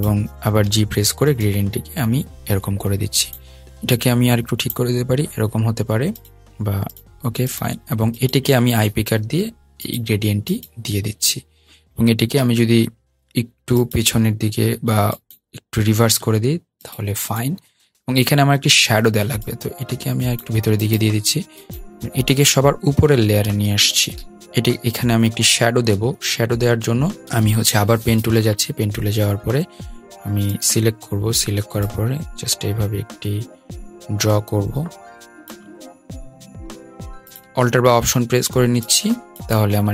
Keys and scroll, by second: 0.7 g, 9.3 i, 22.0 shift+super+], 27.2 p.